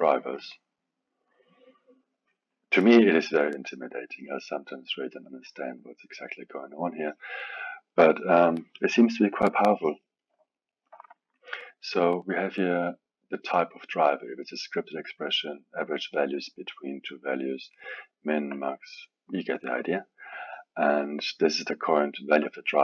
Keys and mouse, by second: 1.4-3.8 drag, 5.0-8.0 drag, 10.4-14.0 alt+middle drag, 14.0-17.2 drag, 20.5-22.7 drag.